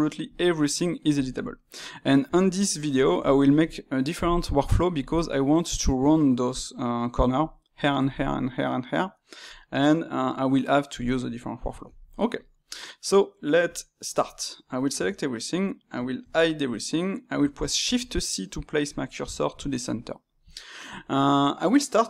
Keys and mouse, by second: 2.1 a, 2.7-6.3 middle drag, 11.2-14.9 middle drag, 14.9 a, 17.8 shift+c, 18.9-22.0 shift+middle drag.